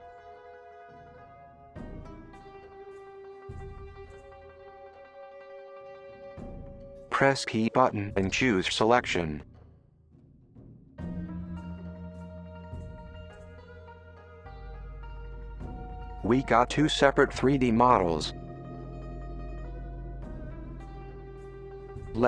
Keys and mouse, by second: 0.1 alt+shift+click, 0.5 alt+shift+middle click, 0.6 alt+shift+click, 0.9 middle click, 1.5 alt+shift+click, 1.7 middle click, 2.4 middle click, 2.7 middle click, 3.0 middle click, 3.2 middle click, 3.8 alt+shift+click, 4.0 alt+shift+click, 4.1 alt+shift+click, 4.4 alt+shift+middle click, 4.7 alt+shift+click, 4.7 alt+shift+click, 5.1-5.4 alt+shift+middle drag, 5.4-5.7 alt+shift+drag, 5.8 middle click, 6.1 middle click, 6.3 middle click, 7.9 p, 13.8 middle click, 16.0 click, 18.6-20.5 middle drag, 20.9 click.